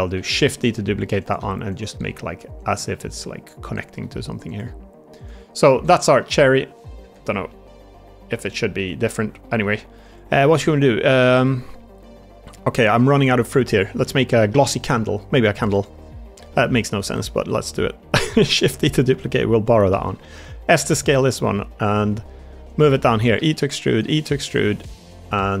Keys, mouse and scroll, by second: 0.0-2.9 typing, 2.5 click, 3.5 click, 3.9 middle click, 4.4 click, 5.6 Tab, 6.1 middle click, 6.9 Tab, 7.4-9.0 middle drag, 9.3 middle click, 9.9 Tab, 9.9-10.3 drag, 10.4 middle drag, 11.1-11.9 middle drag, 12.1 shift+middle drag, 12.4 middle drag, 12.8-13.1 middle drag, 14.3 middle drag, 14.7 middle drag, 15.8 Tab, 16.4 middle click, 17.0 middle click, 17.6 click, 18.2 shift+d, 19.1 click, 19.8 s, 21.2 middle click.